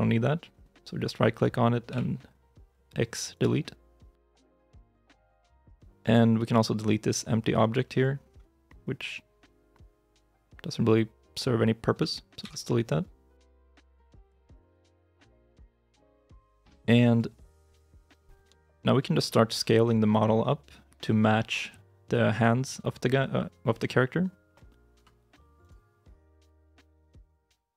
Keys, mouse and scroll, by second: 1.8 x, 4.5 shift+middle click, 5.5 shift+middle click, 14.1 scroll up 1, 14.7 shift+middle click, 18.5 shift+middle click, 19.6-20.3 scroll down 1, 20.3 middle click, 24.9 s, 27.6 middle click.